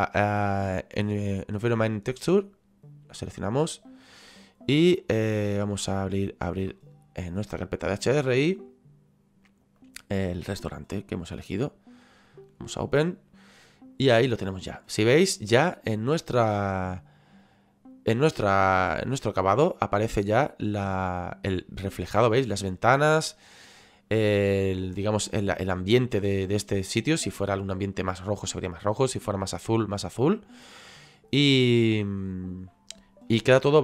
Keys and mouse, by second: 2.2 click, 5.4 click, 7.8 click, 9.8 click, 11.1 click, 14.6 middle click, 20.4 middle click, 22.5 middle click, 25.1 middle click, 26.2 middle click, 28.8 middle click, 33.5 shift+middle click.